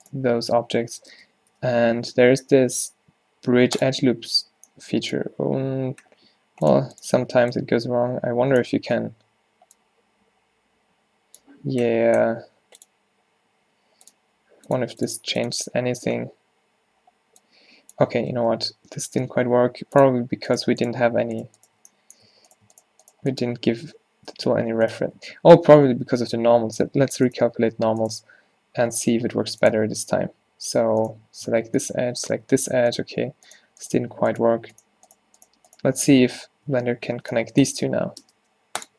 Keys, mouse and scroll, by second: 1.2 space, 9.0-12.9 middle drag, 19.3 x, 20.6 click, 22.0 middle click, 22.3 a, 24.4 f, 25.2 a, 25.4 a, 26.1 ctrl+n, 26.9 a, 32.4 z, 37.3 b, 38.3 space.